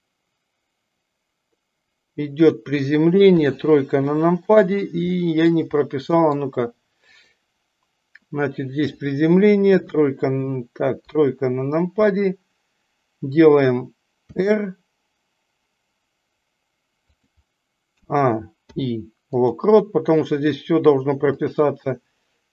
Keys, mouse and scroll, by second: 4.1 middle drag, 5.1 shift+middle click, 6.0 middle drag, 7.0 click, 21.4 click.